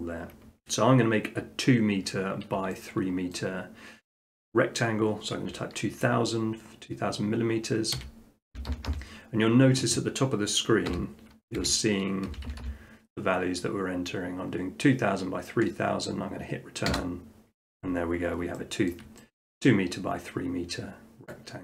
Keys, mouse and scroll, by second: 2.6 click, 3.4 shift+middle click, 8.0-8.5 typing, 10.9-12.3 typing, 16.9 Return, 18.0 middle click, 18.9 shift+middle click, 19.6 middle click.